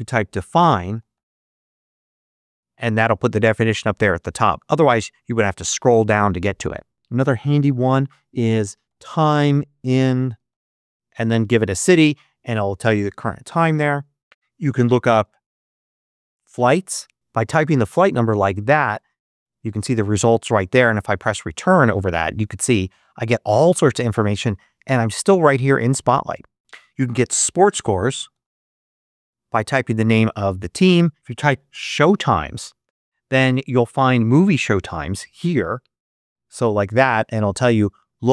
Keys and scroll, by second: 0.0-1.9 typing, 8.4-11.2 typing, 14.8-16.5 typing, 18.9 Down, 21.0 Return, 27.1-28.3 typing, 30.9-32.5 typing.